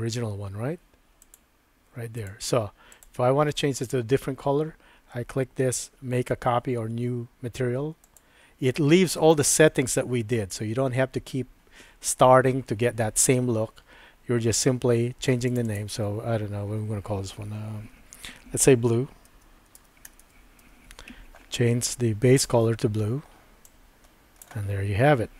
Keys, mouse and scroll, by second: 1.5 click, 2.9 click, 8.0 click, 15.5 click, 15.7-21.4 drag, 22.4 click.